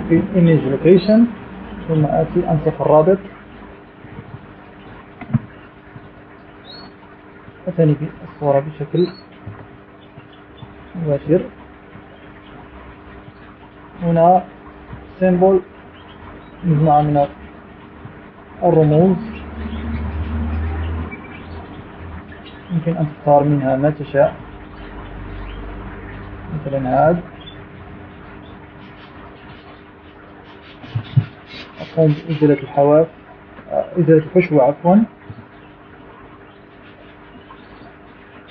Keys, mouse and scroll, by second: 2.0 click, 3.6 click, 5.7 click, 6.9 ctrl+v, 7.6 click, 9.2 click, 11.2 Delete, 11.8 click, 12.3 click, 12.9 click, 13.6-15.2 drag, 16.6-19.1 drag, 19.7 click, 20.7 click, 21.6 click, 23.4 click, 26.1-27.8 drag, 28.8-31.3 drag, 37.0 click.